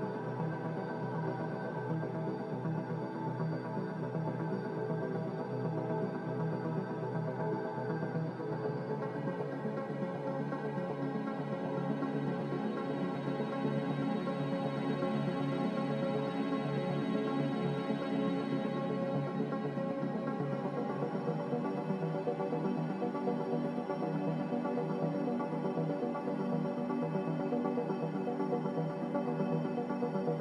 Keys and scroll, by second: 6.2 z, 8.5 a, 9.5 Escape, 14.6 b, 16.5 Delete, 17.1 Delete, 20.3 z, 20.5 c, 24.3 b.